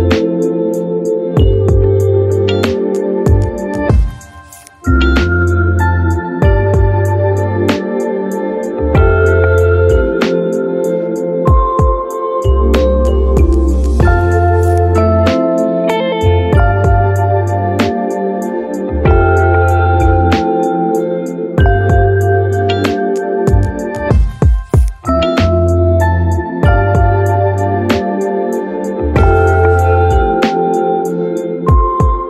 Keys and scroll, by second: 15.7 ctrl+z.